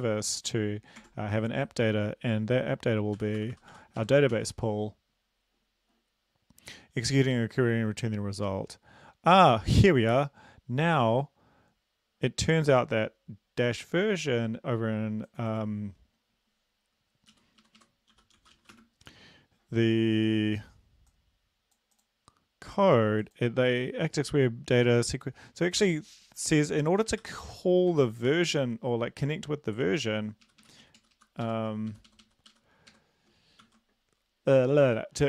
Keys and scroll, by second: 1.0 Tab, 3.2-3.7 typing, 4.0 Right, 4.4 ctrl+s, 17.3 Down, 17.6 Right, 17.8 Right, 18.1-18.8 typing, 25.8 ctrl+c, 27.2 ctrl+v, 28.0 ctrl+s, 30.4 Up, 30.6 Up, 30.8 Down, 31.0 Down, 31.1 Left, 31.4 Home, 31.9 ctrl+shift+Right, 32.1 ctrl+shift+Right, 32.2 ctrl+shift+Right, 32.5 ctrl+shift+Right, 33.2 ctrl+shift+Right, 33.6 ctrl+c.